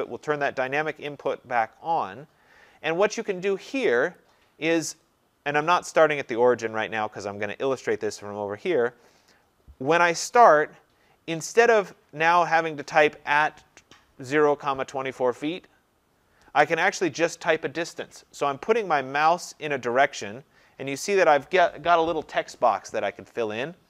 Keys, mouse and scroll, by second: 0.7-3.8 drag, 4.2-9.3 drag, 10.1 click, 15.1 click.